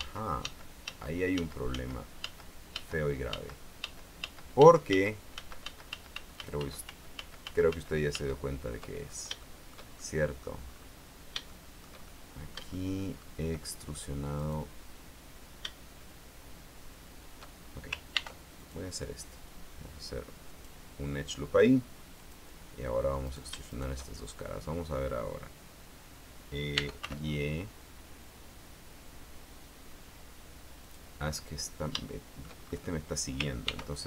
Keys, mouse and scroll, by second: 9.2-9.5 ctrl+scroll up 2, 9.6 shift+click, 10.1 shift+click, 10.8-11.5 scroll up 1, 11.5 shift+scroll up 1, 11.6 shift+click, 12.5 shift+click, 14.5 right click, 18.3 ctrl+r, 18.7 ctrl+click, 20.7 click, 22.3 click, 23.4 shift+right click, 23.9 shift+right click, 24.6-25.1 scroll down 2, 26.7-27.6 typing, 31.0 click, 31.5 middle click, 33.8 ctrl+r.